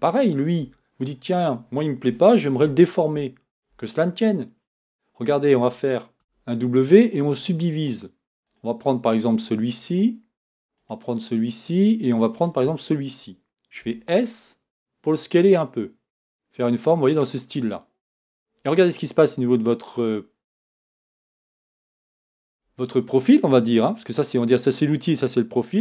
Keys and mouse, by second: 0.3 right click, 0.6 Tab, 6.2 w, 13.8 s, 18.3-22.5 drag, 22.5 Tab.